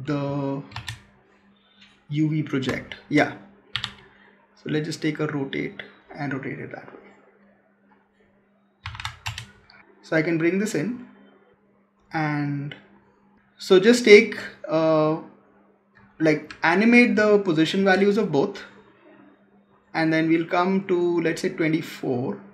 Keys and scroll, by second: 2.5 space.